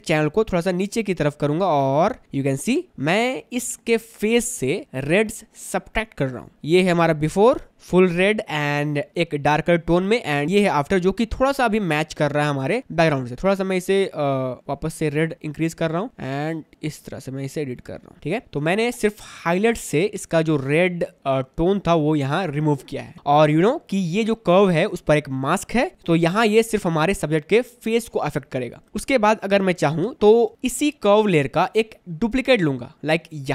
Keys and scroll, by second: 3.2 space, 12.4 space, 18.2 space, 30.2 space.